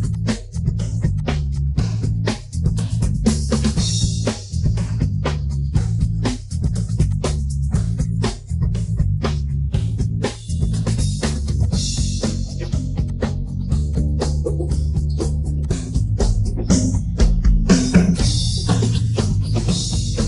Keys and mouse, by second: 0.1 click, 0.5 click, 1.1 click, 1.7-2.1 middle drag, 2.6 Tab, 2.8 middle drag, 3.6 middle drag, 4.2 middle click, 4.9 Tab, 5.2 click, 7.3 Tab, 7.5 middle click, 8.0 middle click, 8.7 middle click, 10.3 click, 11.6 click, 12.6 ctrl+r, 13.2 right click, 13.9 click, 15.6 click, 16.4 middle click, 17.6 Tab, 17.8 middle drag, 18.6 ctrl+2, 18.9 middle drag, 19.6 click, 20.0-20.2 middle drag.